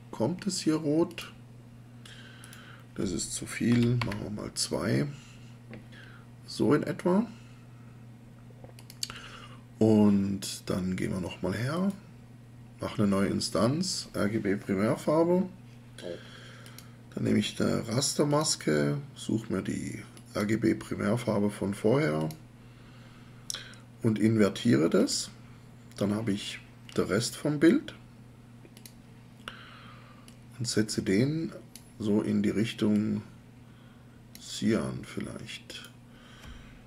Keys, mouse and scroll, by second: 3.7 2, 4.0 Return.